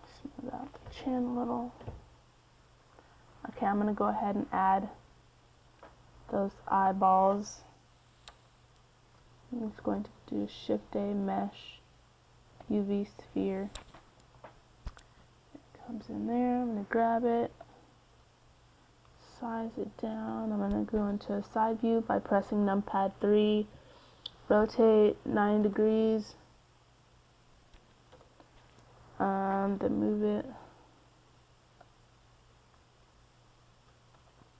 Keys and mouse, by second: 0.4-2.6 drag, 2.6 middle click, 6.3-7.6 drag, 7.6 typing, 8.4 click, 8.8 middle click, 9.8-13.7 middle drag, 11.5 shift+a, 16.8 KP_1, 18.0-19.3 middle drag, 19.3 g, 21.2 z, 22.4 s, 24.5 KP_3, 28.2 r, 33.8-34.5 drag.